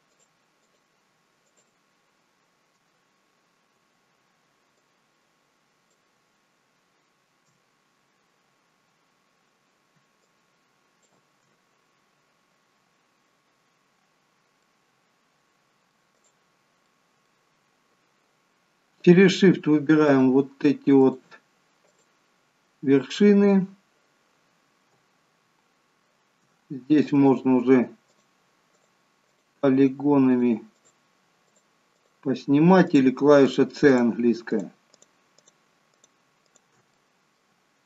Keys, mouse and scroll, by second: 0.1 shift+click, 0.6 shift+click, 1.4 shift+click, 4.7 shift+click, 10.2 alt+shift+click, 14.1-14.6 scroll down 2, 14.6 middle click, 16.2 click, 16.8 middle click, 17.5 scroll up 3, 20.0 alt+shift+click, 26.9 click, 28.0 shift+click, 28.7 click, 29.3 click, 29.7 click, 30.2 shift+click, 30.7 shift+click, 31.5 shift+click, 31.9 shift+click, 32.8 shift+click, 33.4-36.9 shift+click, 36.9 middle click.